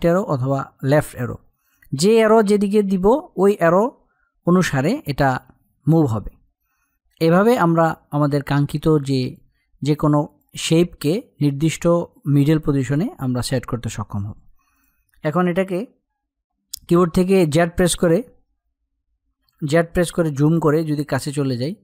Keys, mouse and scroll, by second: 6.1 Down, 12.5 click, 17.2 a, 19.1 z, 20.2-21.7 drag, 21.7 space.